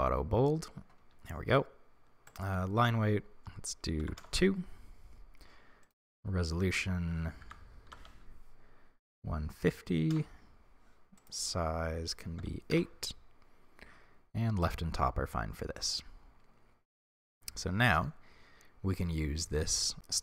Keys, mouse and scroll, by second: 0.0-3.2 drag, 4.3-15.9 drag, 4.3 Return, 12.9 Return, 17.7-20.2 middle drag.